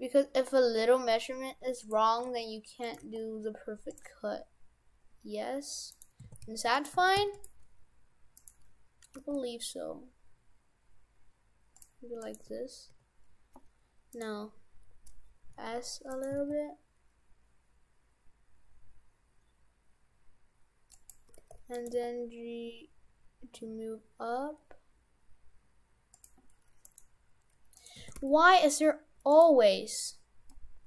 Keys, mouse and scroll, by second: 2.2 g, 3.0 g, 4.2-5.0 scroll down 1, 5.0 scroll down 1, 5.9 right click, 6.3 shift+f, 7.0 shift+f, 8.4 right click, 9.2 g, 11.4 g, 12.2 right click, 12.5 Tab, 12.9 Tab, 14.1 right click, 15.5 s, 16.3 s, 21.3 g, 21.9 g, 26.9 right click, 27.7 right click, 28.0 shift+f, 29.9-30.5 scroll up 4, 30.5 middle click.